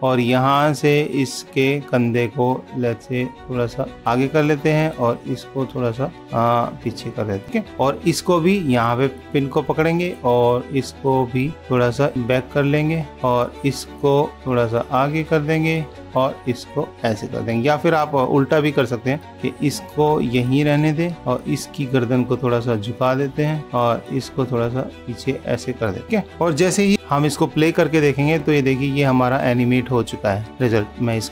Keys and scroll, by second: 26.9 super+=.